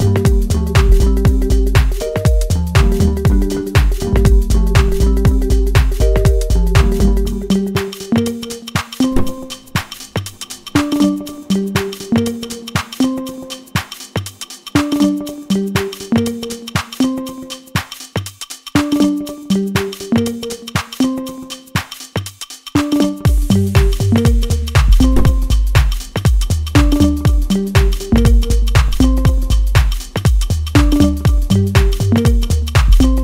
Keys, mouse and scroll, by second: 1.8 click, 3.5-7.2 middle drag, 7.2 click, 8.1-18.6 middle drag, 18.6 shift+click, 19.4-21.8 middle drag, 21.8-28.1 drag, 28.1-32.2 middle drag, 32.2 ctrl+z, 32.7-33.2 middle drag.